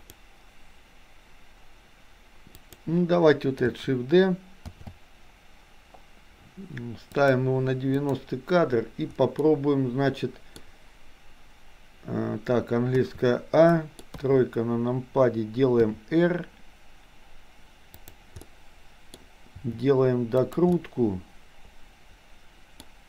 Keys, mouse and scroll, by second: 0.1 click, 2.6 click, 4.9 shift+d, 8.1 click, 9.5-10.6 middle drag, 13.1 a, 13.9 middle click, 14.1 KP_3, 15.9 r, 18.5 middle click, 19.6 r, 20.7-22.9 middle drag.